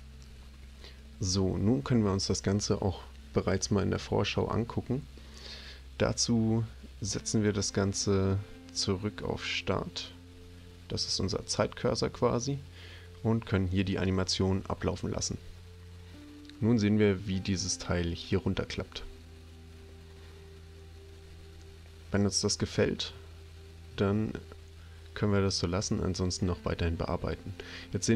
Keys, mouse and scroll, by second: 9.6-11.0 drag, 13.9 click.